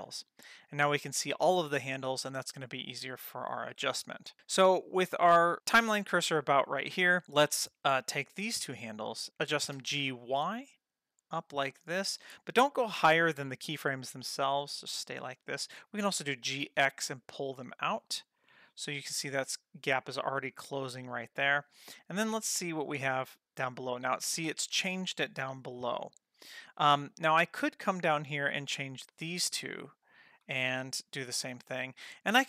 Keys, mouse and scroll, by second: 0.0 click, 8.0 click, 8.9 shift+click, 9.7 g, 16.2 g, 21.8-27.3 drag, 28.4 click, 29.2 shift+click.